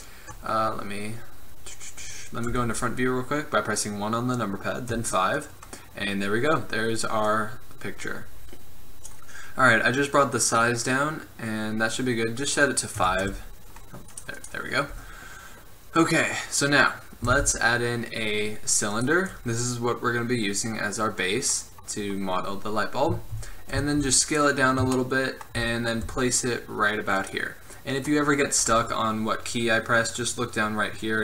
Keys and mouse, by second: 1.1-2.6 drag, 2.6 KP_1, 5.1 KP_5, 7.4 click, 13.1 KP_5, 13.4 Return, 17.5 shift+a, 19.7 middle click, 23.9 s, 26.2 g.